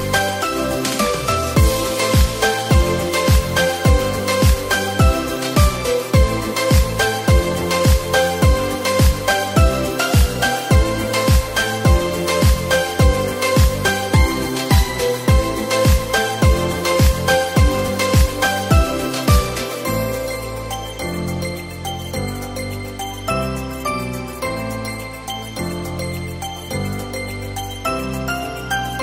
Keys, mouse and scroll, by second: 0.0 ctrl+r, 1.7 s, 4.6 ctrl+r, 7.6 middle click, 8.1 Tab, 8.8 KP_1, 9.2 Tab, 10.1 z, 12.1 click, 12.5 c, 14.6 drag, 16.2 z, 16.8-17.1 scroll down 4, 17.1 Tab, 17.3 click, 17.7-20.6 middle drag, 20.6 shift+a, 23.6-26.9 drag, 26.9 Tab, 27.8 r.